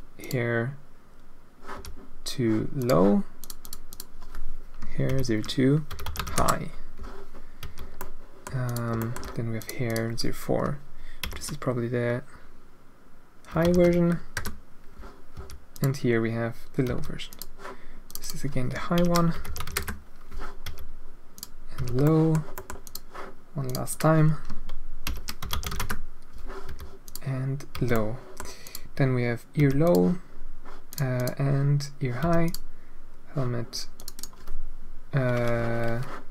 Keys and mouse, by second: 0.1 click, 1.7 h, 2.7 click, 3.4 click, 3.6-7.0 drag, 7.6 h, 7.9-8.4 middle drag, 8.6 middle click, 9.1 shift+middle click, 9.5-15.0 drag, 15.3 h, 15.7 click, 16.8 h, 17.2 click, 18.0-19.1 drag, 19.1-20.3 middle drag, 20.6 h, 21.3 middle click, 21.7 h, 22.0 middle click, 22.5 middle click, 22.8 middle click, 23.6-26.4 drag, 26.6 h, 27.0 click, 27.7 h, 27.9-28.4 middle drag, 28.6 middle click, 29.5 h, 29.8 click, 30.9 drag, 31.1 click, 32.2 h, 32.4 click, 33.9-35.7 drag.